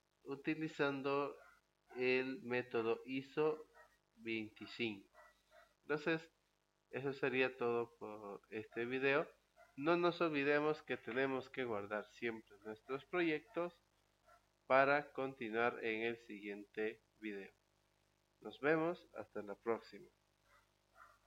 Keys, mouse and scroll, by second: 14.6 click, 17.5 click, 21.2 click.